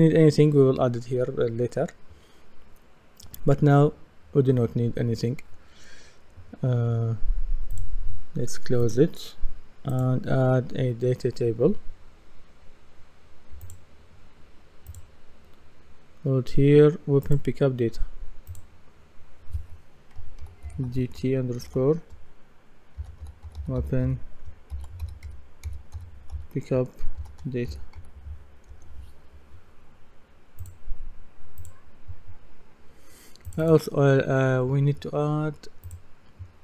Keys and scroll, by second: 20.4 shift+d, 20.7 shift+t, 22.8-28.5 typing, 28.7 Return.